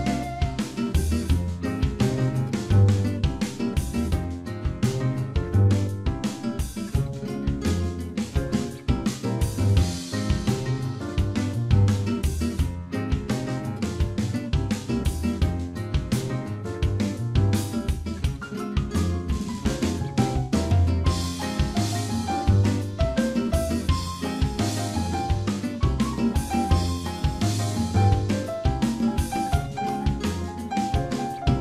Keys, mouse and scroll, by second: 0.7 scroll down 1, 1.4-1.8 scroll down 2, 1.7 shift+middle click, 2.1 middle click, 2.6 shift+middle click, 5.6 middle click, 6.7 shift+middle click, 7.3 click, 7.8 Tab, 8.0 middle click, 9.6 click, 10.3 alt+click, 10.9 middle click, 12.3 shift+d, 13.7 p, 15.0 Tab, 15.2 click, 16.2 Tab, 16.8 middle click, 17.4 a, 17.9 middle click, 19.3 click, 22.4 click, 23.0 alt+click, 24.0 click, 27.6 click, 27.9 shift+click, 28.6 click, 30.4 ctrl+r.